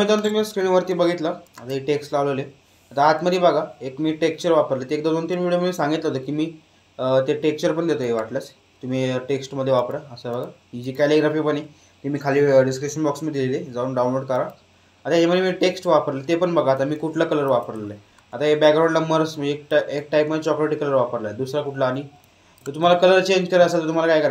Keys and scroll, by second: 0.4 space, 16.6 space, 19.0 space, 21.8 space.